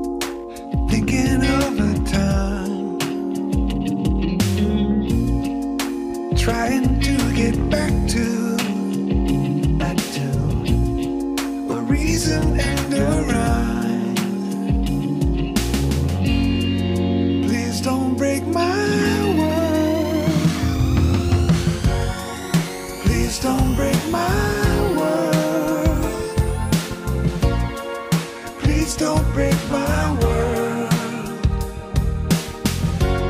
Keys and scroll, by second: 0.5 Tab, 4.5 Tab, 7.6 Return, 7.8 Return, 9.4 ctrl+space, 10.9 Tab, 14.8 Tab, 17.0 ctrl+space, 22.6 Return, 23.0 ctrl+shift+s, 28.9 ctrl+t, 31.9 ctrl+r, 32.6 ctrl+r.